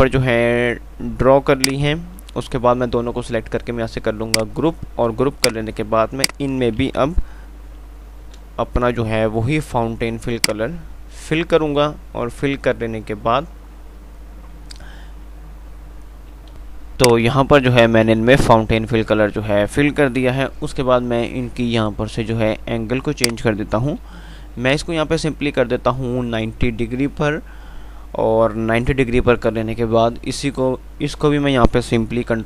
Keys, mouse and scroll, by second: 0.0-1.9 drag, 6.3 typing, 7.8 F11, 10.6 click, 11.3 ctrl+r, 16.8 click, 20.7 F11, 23.5 click, 25.9 typing.